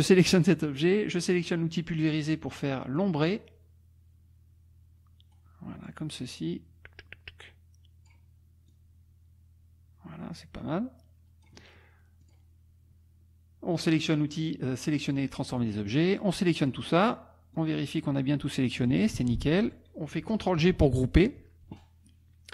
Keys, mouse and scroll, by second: 2.0 click, 2.9-5.3 drag, 5.3-5.9 scroll down 2, 8.7-11.6 drag, 12.2 click, 15.6-16.9 drag, 17.5-19.1 drag, 19.1 ctrl+z, 20.7 ctrl+g.